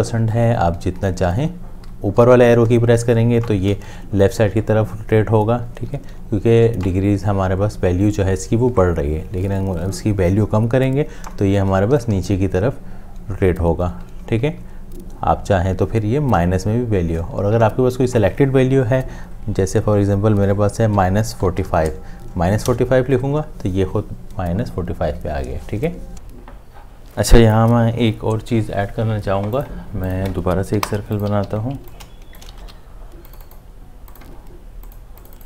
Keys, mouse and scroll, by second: 11.3 Down, 21.0 -, 21.6 4, 22.7 Return, 30.7 Delete, 31.4 m, 32.0 m, 32.3 shift+click.